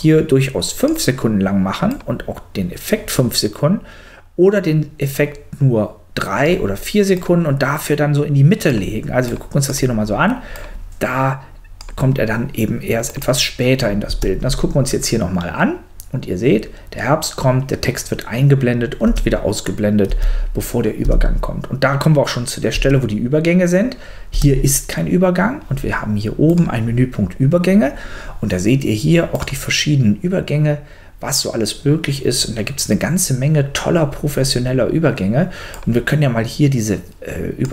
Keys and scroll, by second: 14.1 space, 19.0 space, 22.7 space, 24.3 space.